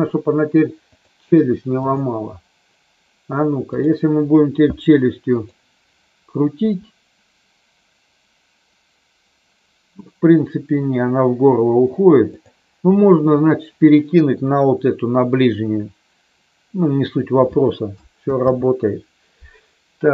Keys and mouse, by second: 1.0 click, 3.7 click, 5.3 click, 6.4 r, 12.3 click, 18.3 ctrl+z.